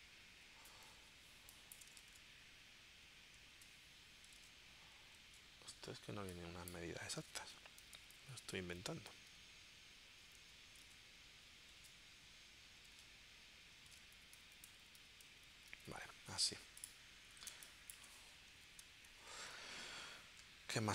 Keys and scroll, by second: 1.0 space, 2.1 super+Tab, 3.5 super+Tab, 4.4 super+Tab, 5.3 super+Tab, 7.8 Down, 9.1 Left, 10.2 Left, 10.9 super+Tab, 13.9 super+Tab, 14.2 Right, 17.5 space.